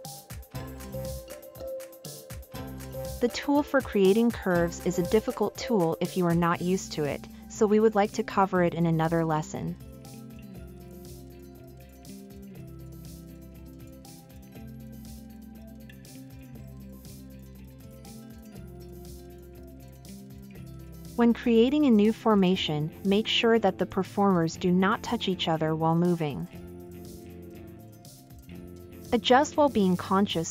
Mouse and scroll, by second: 3.9-4.6 middle drag, 5.1 scroll up 2.